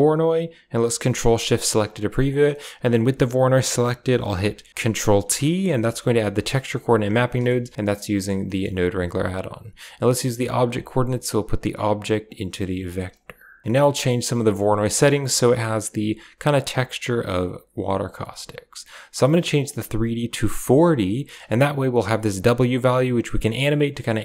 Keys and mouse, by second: 1.2 ctrl+shift+click, 2.2-3.4 drag, 5.1 ctrl+t, 5.5 middle click, 5.8 a, 6.0 middle click, 6.7 click, 6.9 g, 7.3 a, 7.3 middle click, 8.3 middle drag, 10.5-11.5 drag, 11.8 click, 12.2 click, 12.5 g, 13.6 middle click, 14.1 click, 19.0 middle click, 19.4-20.6 drag, 21.9-24.2 drag.